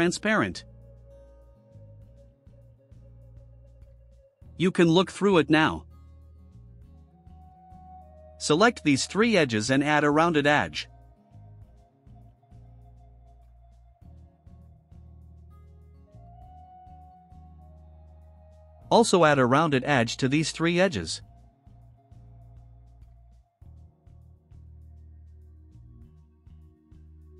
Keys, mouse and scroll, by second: 0.7 click, 1.6 5, 1.9 0, 3.0 click, 3.5 click, 3.8 middle click, 4.2-4.5 right drag, 4.7-6.3 drag, 7.2 click, 8.2 click, 9.1 ctrl+click, 10.4 ctrl+click, 13.2 click, 15.0 5, 15.4 0, 16.5 click, 17.6-18.2 drag, 19.0 click, 19.3 middle click, 20.2 ctrl+click, 21.0 ctrl+click, 22.4 click, 24.8 1, 25.3 0, 26.0 click.